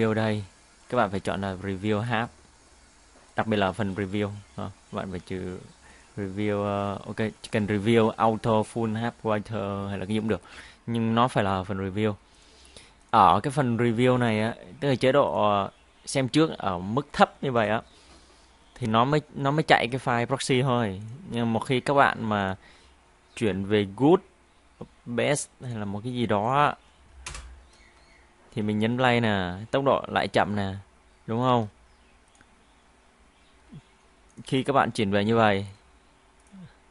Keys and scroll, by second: 28.1 space, 31.5 space.